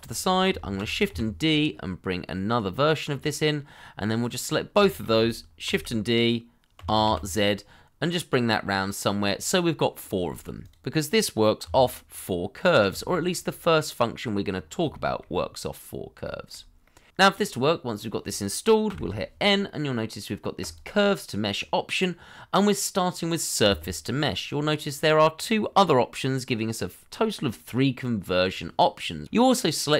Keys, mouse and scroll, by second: 0.1 shift+middle click, 0.7 shift+d, 1.1 y, 4.0 middle click, 4.8 shift+middle click, 5.6 shift+d, 7.0 z, 10.3 shift+middle click, 11.6 g, 12.5 double click, 12.8 g, 13.7 middle click, 14.4-14.8 scroll up 1, 15.2 shift+middle click, 16.8 middle click, 20.2 n.